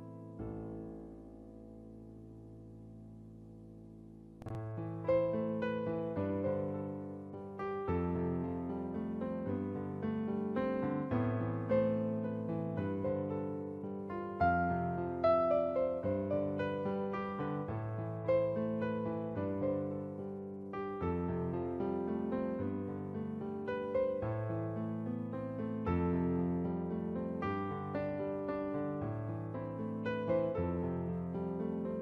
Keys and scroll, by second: 7.2 ], 28.0 b.